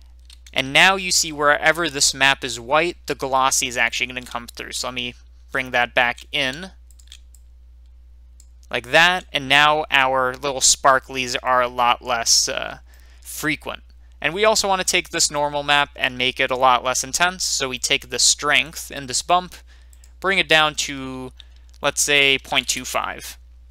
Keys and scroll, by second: 22.3 typing, 22.6 Return.